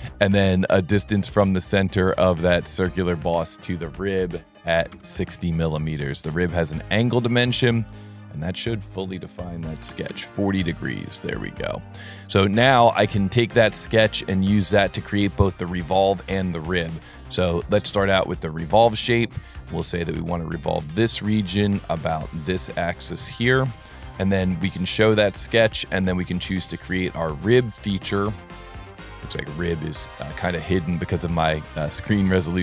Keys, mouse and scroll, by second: 1.3 click, 2.7 click, 3.6 click, 6.1 click, 7.0 click, 8.1 click, 10.7 scroll up 1, 11.4 scroll up 1, 11.7 scroll down 1, 12.2-13.2 middle drag, 13.3-14.0 middle drag, 14.9 middle click, 15.5 scroll up 1, 18.6 click, 20.5 click, 21.5 click, 22.5 click, 23.7 click, 25.0 click, 28.3 click, 28.9-29.9 typing, 32.3 click.